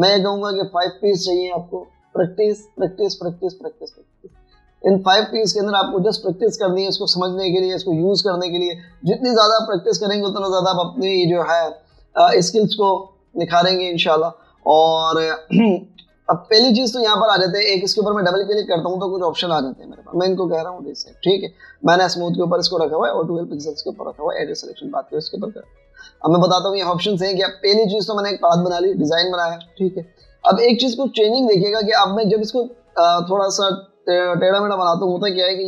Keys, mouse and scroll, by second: 16.0 space, 17.0 b, 19.3 double click, 30.6-31.5 typing.